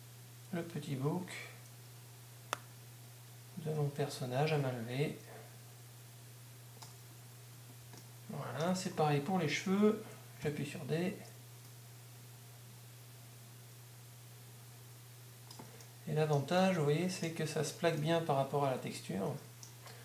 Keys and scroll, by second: 10.8 d.